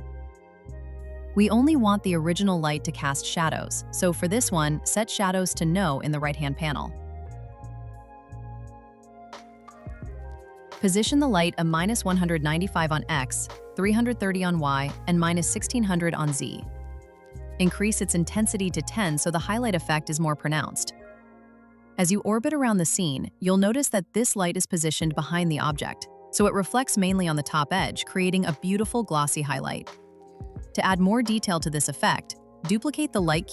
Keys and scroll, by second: 13.2 Return, 14.5 Return, 16.5 Return.